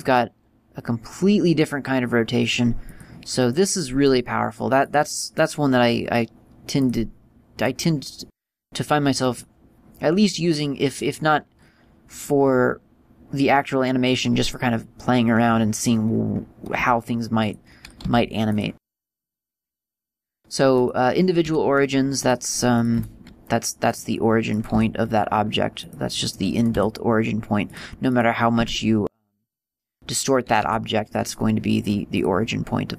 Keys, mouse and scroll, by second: 3.8 click, 7.1 click, 7.9 click, 17.8 click, 18.3 g, 18.9 click, 19.5 click, 22.6 click, 23.0 right click, 23.2 r, 24.2 click, 24.8 right click, 25.0 r, 26.2 click, 26.9 right click, 27.0 r, 28.0 click, 28.4 right click, 28.9 s, 29.8 click, 30.9 r, 32.5 click.